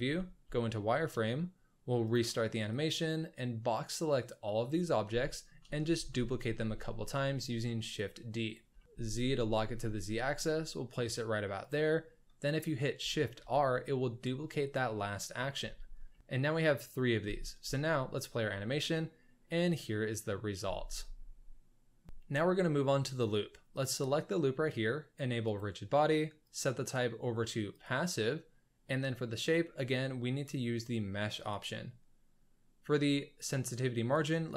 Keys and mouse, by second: 0.0 z, 2.1-4.3 drag, 5.2 shift+middle drag, 6.1 shift+d, 8.7 shift+middle click, 13.5 shift+r, 14.9-15.4 middle drag, 15.5 z, 17.2 space, 20.0 drag, 20.3 middle click, 20.6 space, 21.0-21.6 middle drag, 21.6 drag, 22.0 ctrl+s, 22.2 alt+a, 23.7 click, 25.5 click, 26.5-27.8 drag, 29.3-31.6 drag, 34.1 click.